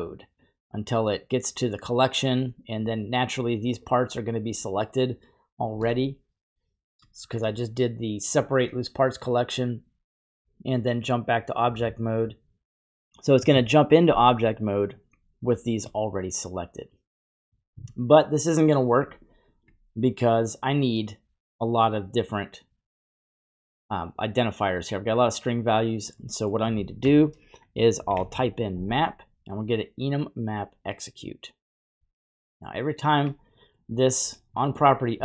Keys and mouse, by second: 0.4-2.3 drag, 2.8-7.1 drag, 14.4 click, 16.0-17.5 middle drag, 17.5 typing, 19.4 ctrl+right click, 26.3 middle click, 27.0 shift+a, 31.8 typing, 32.5 click, 33.3 typing, 33.6 middle click, 34.6 middle click.